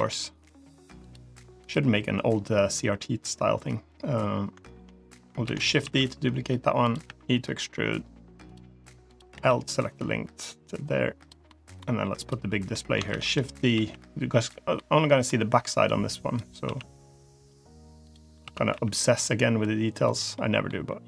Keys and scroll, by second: 5.3 shift+d, 5.7 s, 6.9 e, 9.2 l, 13.0 shift+d, 13.6 s, 16.5 s, 18.3 s, 20.6 e.